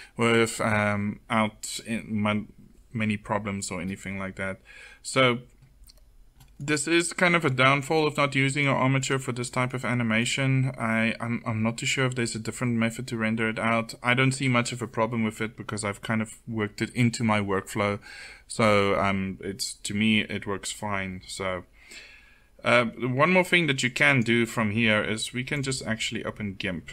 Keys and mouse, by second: 11.3 click, 11.5-23.5 middle drag.